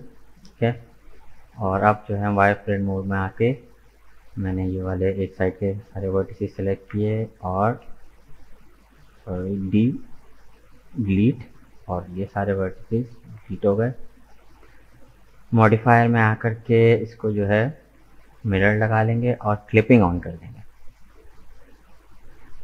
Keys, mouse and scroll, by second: 2.1-6.5 drag, 6.8 KP_1, 9.7 Delete, 13.3 scroll down 1, 13.3 middle click, 13.9 Tab, 15.2-16.2 drag, 18.4-20.5 drag, 20.5-22.6 middle drag.